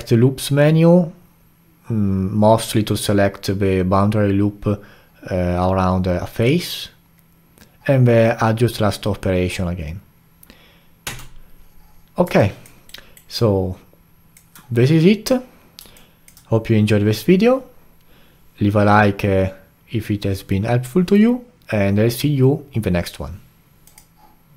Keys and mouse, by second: 11.0 Tab, 12.4-12.9 alt+drag, 12.9-13.4 alt+right drag, 13.4-19.0 alt+drag.